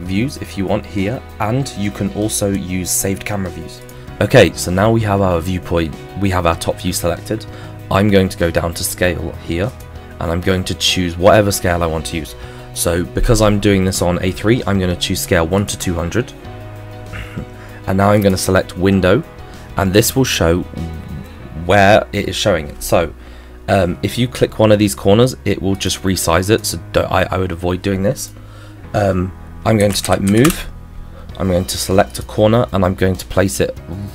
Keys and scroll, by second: 29.8 m, 30.0 o, 30.1 v, 30.3 e, 30.5 Return.